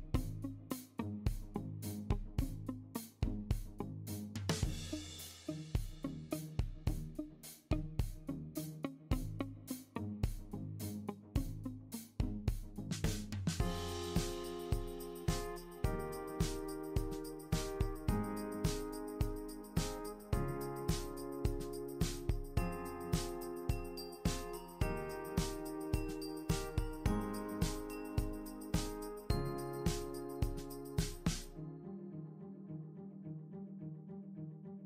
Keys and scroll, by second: 8.4 ctrl+d, 11.2 super+d.